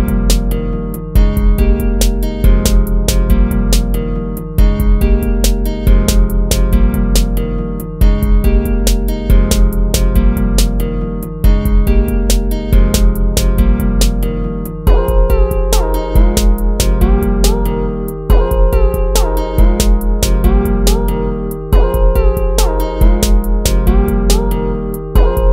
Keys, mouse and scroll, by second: 0.6 ctrl+-, 0.8 ctrl++, 2.4 ctrl+z, 6.1 ctrl+-, 6.4 ctrl++, 7.4 ctrl+z, 8.0 ctrl+-, 8.9 ctrl+-, 9.2 ctrl++, 11.1 ctrl+-, 11.4 ctrl+z, 11.9 ctrl++, 13.7 ctrl+-, 13.9 ctrl++, 14.3 ctrl+-, 14.9 ctrl++, 15.1 ctrl++, 18.2 ctrl+-, 19.6 ctrl+z, 20.6 ctrl+z, 22.5 ctrl+z, 23.3 ctrl+-, 24.5 ctrl+z.